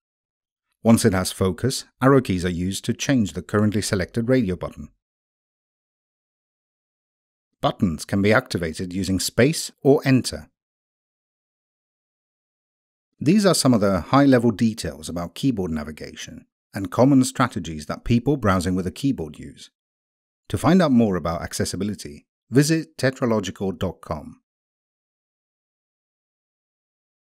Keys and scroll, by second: 0.2 Right, 1.2 Right, 2.4 Right, 3.6 Left, 4.7 Left, 6.0 Left, 7.6 Tab, 9.9 Return.